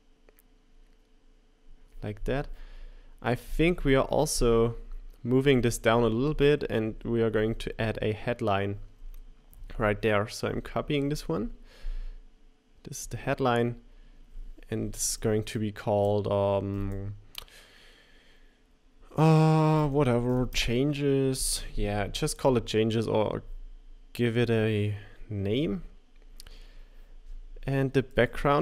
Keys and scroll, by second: 6.8 shift+Down, 10.5 super+c, 21.4 typing, 28.3 super+c.